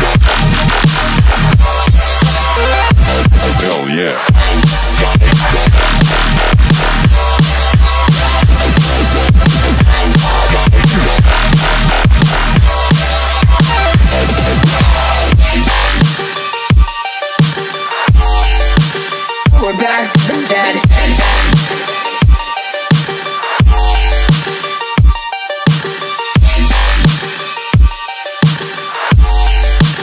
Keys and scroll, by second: 5.0 t, 6.8-12.6 typing, 13.8 Escape, 20.3-22.0 typing, 23.5-26.7 typing, 29.0 4, 29.7 Escape.